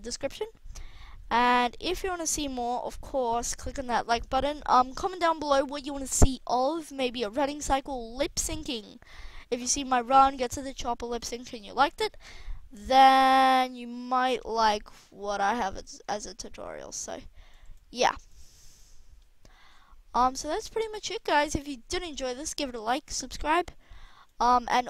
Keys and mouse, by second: 2.4 alt+a, 12.9-14.9 drag, 16.2-21.3 middle drag.